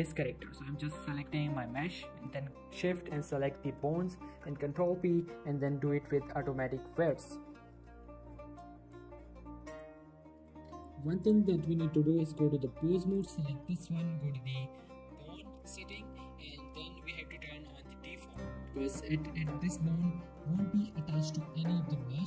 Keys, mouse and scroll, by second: 1.1 g, 1.7 right click, 3.1 shift+click, 4.2 ctrl+p, 8.6 ctrl+p, 9.7 click, 10.9 scroll up 1, 11.3 click, 12.2 Tab, 13.2 click, 18.3 click, 18.8 g, 19.4 right click, 19.7 g, 19.9 right click, 20.2 scroll down 1, 20.5 shift+middle click, 20.7 g, 21.0 right click, 22.1 g.